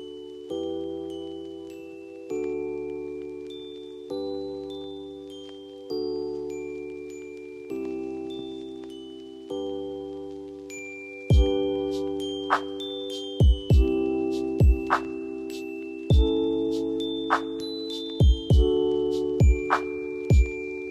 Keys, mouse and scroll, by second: 2.3 right click, 3.1 click, 4.0 scroll down 1, 4.8 click, 8.8 click, 11.7-12.8 typing, 12.9-17.3 drag, 17.3 ctrl+g.